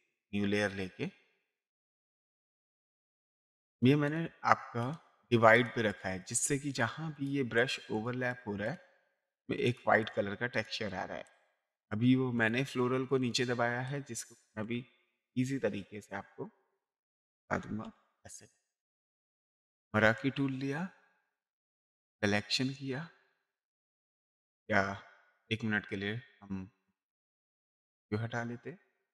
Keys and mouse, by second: 0.1 click, 1.3 click, 15.9 click, 19.6 m, 22.0 click, 24.3 ctrl+d, 26.3 click, 27.4 click, 28.6 click.